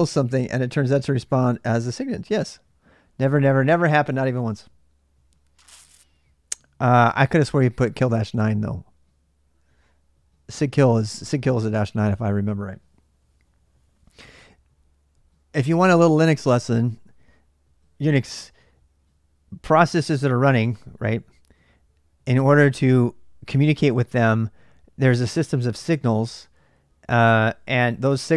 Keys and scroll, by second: 27.8 q.